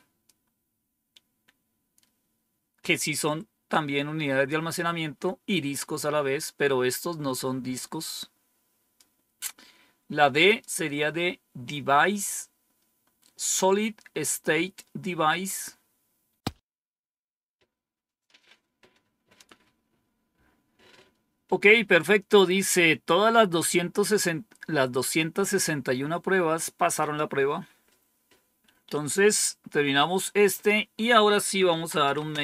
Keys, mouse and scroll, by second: 7.9-8.9 drag, 10.4 click, 16.2 scroll down 1, 26.9 click, 28.8 Page_Up, 30.5 Page_Down, 31.4-32.4 typing.